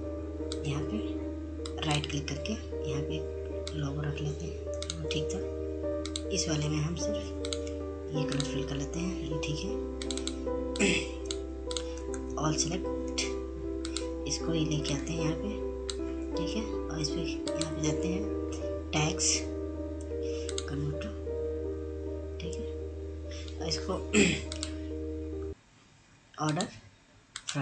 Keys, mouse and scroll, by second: 0.3 right click, 1.2 scroll up 1, 2.3-4.7 drag, 8.1 scroll down 1, 9.4-11.3 drag, 11.5 ctrl+a, 13.1-18.0 drag, 20.0 click, 21.0 scroll up 1, 24.0 click, 25.9-27.6 drag.